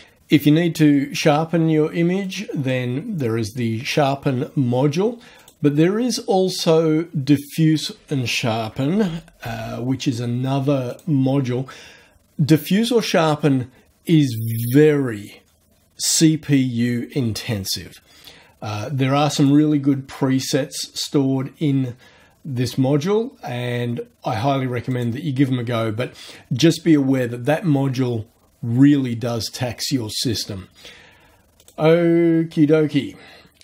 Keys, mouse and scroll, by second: 2.2 click, 5.4 click, 7.7 click, 8.7-9.9 typing, 10.9 click, 19.4 click, 24.9 click, 31.6 click.